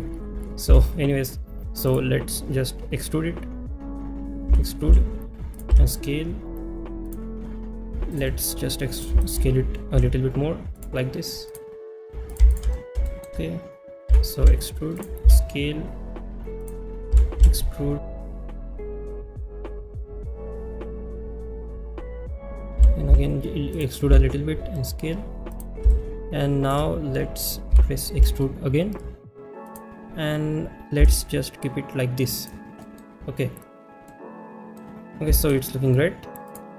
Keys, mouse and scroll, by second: 1.9 click, 1.9 s, 5.5 click, 5.5 e, 5.5 z, 7.1 click, 7.1 s, 8.9 click, 10.8 s, 13.1 shift+middle click, 15.0 click, 15.0 e, 15.0 z, 16.6 click, 16.6 s, 18.0-22.6 typing, 18.3 shift+middle click, 19.4 shift+middle click, 20.6 click, 20.7 click, 20.8 shift+middle click, 21.4 shift+middle click, 21.4 shift+middle click, 22.2 shift+middle click, 23.7 click, 23.7 e, 23.7 z, 25.5 click, 25.5 s, 25.9 shift+middle click, 29.7 click, 29.7 e, 29.7 z, 32.4 click, 32.4 s, 32.8 middle click, 34.1 middle click, 36.5 click.